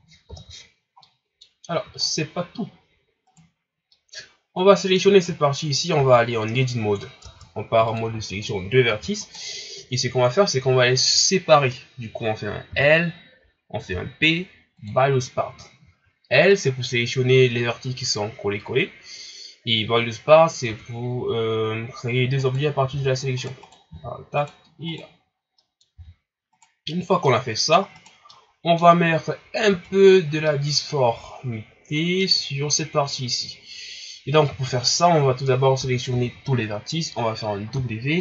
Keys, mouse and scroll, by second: 0.5 shift+z, 0.6-1.0 scroll down 2, 1.0-1.7 middle drag, 1.7-2.3 scroll down 8, 2.3-3.3 scroll up 4, 3.3 right click, 3.9-5.4 middle drag, 5.4 ctrl+scroll up 3, 6.0 Tab, 8.0 ctrl+Tab, 9.2 right click, 12.7 l, 14.9 p, 16.5 right click, 20.7 Tab, 22.4 right click, 22.8 g, 23.6 right click, 23.9 g, 24.9 right click, 25.4 scroll down 1, 25.6 middle click, 25.9 g, 27.3 middle click, 28.0 right click, 28.3-29.0 middle drag, 29.0-29.7 scroll up 1, 29.7 Tab, 30.5-35.8 middle drag, 35.8 a, 36.1 a.